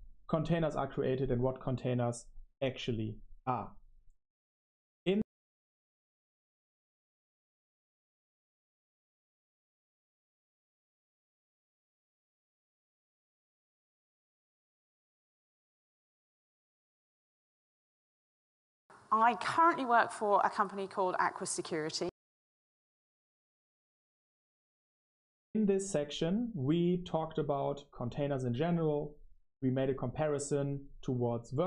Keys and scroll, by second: 6.4-12.1 typing.